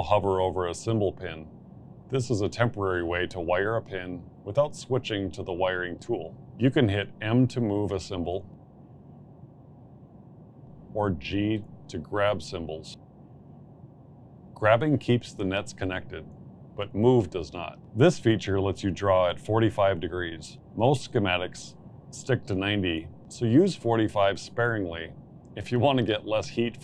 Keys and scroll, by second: 7.2 m, 11.2 g.